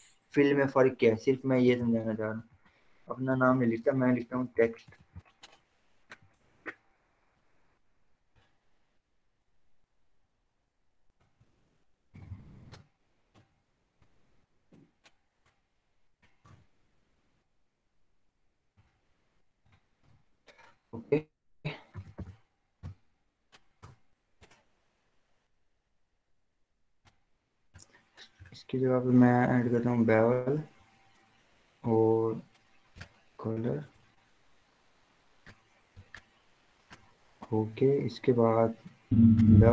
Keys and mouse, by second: 1.8 click, 2.0-5.2 typing, 6.1 click, 7.0-8.2 typing, 9.2 click, 12.2-12.9 typing, 12.9 Return, 14.0 ctrl+t, 15.5 click, 16.6 Return, 16.9 ctrl+a, 17.9 v, 18.9 click, 20.3 ctrl+d, 21.9 alt+l, 22.1-23.5 typing, 23.8 Return, 26.7 click, 33.0 click, 37.0 click, 37.2 click.